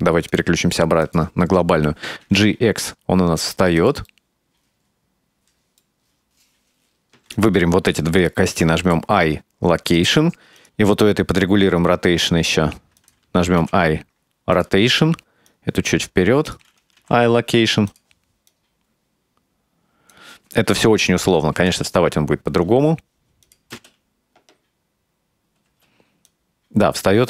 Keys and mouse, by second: 0.4-1.4 drag, 2.3 g, 4.1-5.2 middle drag, 5.7-6.7 right drag, 7.4 shift+right click, 8.6 i, 10.7 right click, 10.8 r, 11.8 r, 13.7 i, 15.5-16.6 right drag, 18.5-20.2 drag, 20.9 KP_0, 21.6 space, 22.8 space, 23.5 click, 23.8 space, 25.8 space, 26.3-27.2 drag.